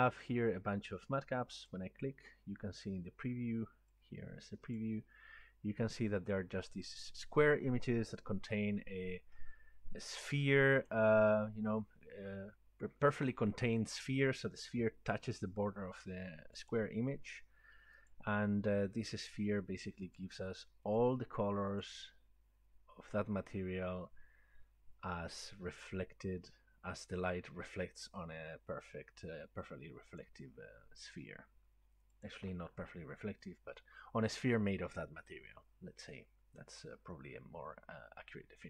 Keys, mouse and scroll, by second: 5.1 click, 10.9 click, 16.7 click, 18.2 click, 19.3 click, 20.3 click, 21.2 click, 21.9 click, 30.3 click, 32.9 click.